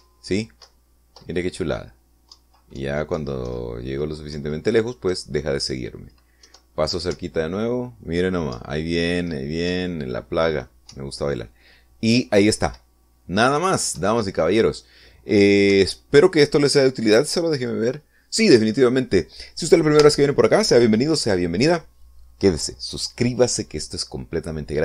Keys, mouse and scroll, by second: 2.0 Left, 3.7 Down, 5.7 Down, 6.4 Down, 7.8 Left, 8.5 Up, 9.9 Right, 15.3 Right, 17.1 Escape, 18.9 click, 19.7 click.